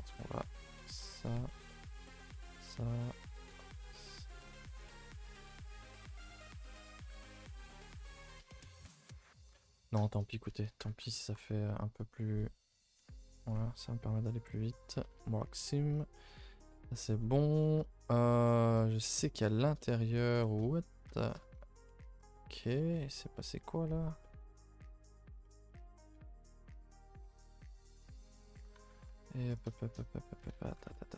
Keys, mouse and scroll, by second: 0.1 alt+click, 0.3-1.8 middle drag, 1.8-2.2 scroll up 2, 2.2 alt+shift+click, 2.4-3.7 middle drag, 3.7 alt+shift+click, 3.9 middle click, 4.1-4.4 scroll up 2, 4.4 shift+middle click, 4.7-5.5 scroll up 2, 5.5 shift+click, 5.8 scroll down 2, 5.9-7.4 middle drag, 7.4 alt+shift+click, 7.6 middle click, 8.2-8.5 scroll up 2, 8.5 middle click, 8.9-9.6 scroll down 5, 9.6 middle click, 10.1-10.4 scroll up 2, 10.4 a, 10.6 a, 11.0 ctrl+r, 11.6-14.5 middle drag, 14.5 right click, 14.8 scroll down 2, 15.0 a, 15.1 a, 15.3 middle click, 15.5-15.9 scroll up 2, 15.9 scroll down 2, 16.1-17.3 middle drag, 17.3 scroll up 1, 17.6 shift+middle click, 18.1 scroll up 1, 18.3-20.0 middle drag, 20.0-20.4 scroll up 2, 20.4 shift+middle click, 20.7-21.1 scroll up 4, 21.1 shift+middle click, 21.5-22.2 scroll down 2, 22.2 z, 22.6 middle click, 23.3-24.2 scroll up 3, 23.6 middle click, 24.2 middle click, 24.7 alt+click, 25.4 middle click, 26.1 s, 27.2 s, 29.5 z, 29.7 shift+middle click, 29.9-30.4 scroll down 4, 30.4 a, 30.5 a, 30.7 3, 31.0 alt+Left.